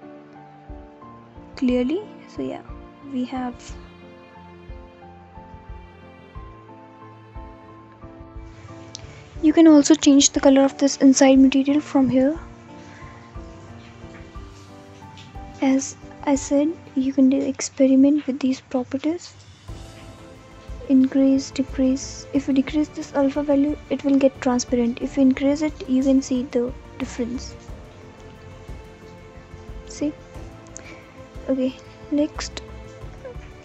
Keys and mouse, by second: 0.2 click, 2.1 click, 3.5 middle click, 5.8 click, 6.3 click, 8.8 click, 19.9-22.4 middle drag, 24.2-27.0 middle drag, 27.5-29.6 middle drag, 29.6 click, 29.9-30.9 drag, 30.9 g, 31.3 x, 32.6 click, 33.4 r.